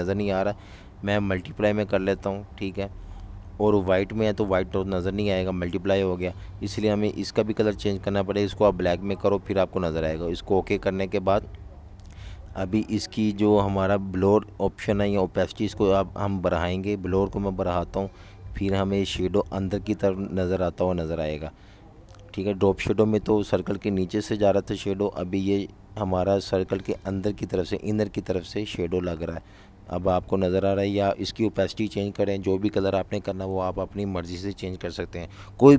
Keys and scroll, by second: 32.4-34.0 typing.